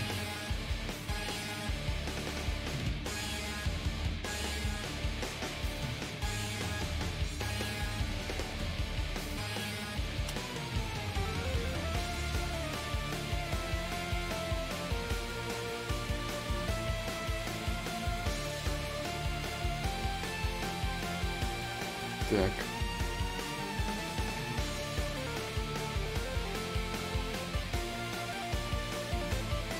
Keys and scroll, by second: 1.1 z, 3.7 ctrl+z, 3.7 y, 15.9 ctrl+z, 15.9 y, 16.4 ctrl+z, 16.4 y, 24.8 ctrl+z, 24.8 y.